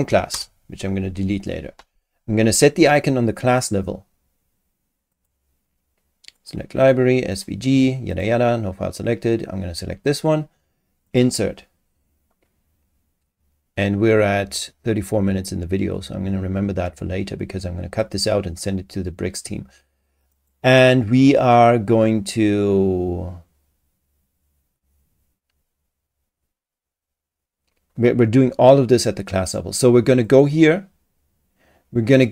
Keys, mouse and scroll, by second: 0.0-0.1 typing, 0.3 Return, 5.1 click, 6.4 click, 7.3 click, 8.1 click, 10.0 click, 11.1 click, 20.3 click, 30.2 click.